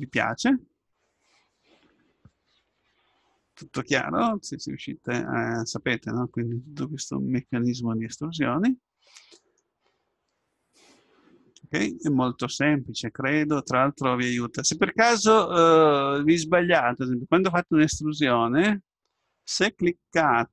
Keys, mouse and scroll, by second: 5.1-6.9 middle drag, 11.8-16.1 middle drag, 17.9 e.